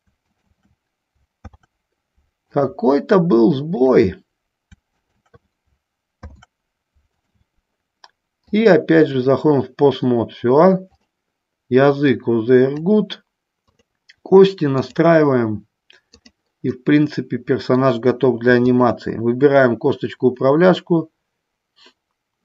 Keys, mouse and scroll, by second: 0.4 shift+click, 1.7 ctrl+p, 3.9 click, 5.2 shift+click, 6.3 ctrl+p, 8.9 click, 11.1-13.5 drag, 13.8 click, 15.0-16.5 drag, 16.9-18.0 middle drag, 18.9-21.9 shift+drag.